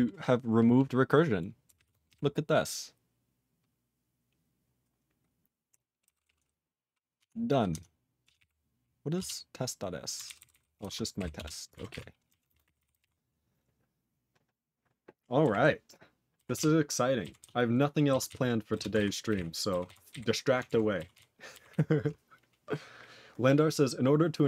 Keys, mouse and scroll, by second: 3.1 p, 6.5 n, 7.1 Tab, 7.7 Tab, 8.2 p, 8.3 p, 9.3 Return, 10.2 ctrl+n, 10.3 ctrl+n, 10.4 ctrl+n, 11.3 Return, 12.2 ctrl+a, 12.4 ctrl+space, 12.5 ctrl+e, 12.6 ctrl+n, 12.8 ctrl+n, 12.9 ctrl+g, 12.9 ctrl+e, 15.6 ctrl+s, 16.5 ctrl+s, 17.3 ctrl+s, 18.2 ctrl+s, 18.7 ctrl+space, 18.9 ctrl+alt+b, 19.2 ctrl+g, 19.3 ctrl+e, 19.8 ctrl+s, 20.1 ctrl+b, 20.6 ctrl+alt+f, 21.1 ctrl+s, 21.6 ctrl+s.